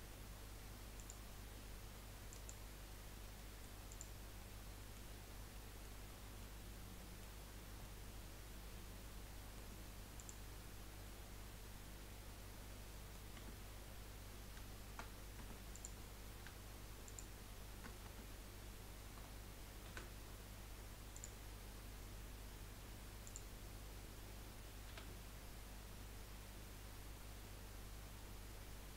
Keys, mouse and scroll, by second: 0.9-1.4 drag, 2.5 click, 3.2 scroll down 3, 3.3-4.0 middle drag, 4.0 click, 4.4-5.2 middle drag, 5.2 scroll up 1, 5.5-6.1 middle drag, 6.1-6.4 scroll down 3, 6.4-7.4 middle drag, 7.4 scroll up 4, 8.0-10.9 middle drag, 12.9 middle click, 13.4 Tab, 13.9 scroll up 1, 15.4 Tab, 15.7 click, 17.0 shift+click, 18.0 Tab, 19.9 a, 21.1-23.7 drag, 23.7 scroll up 1, 25.1 s.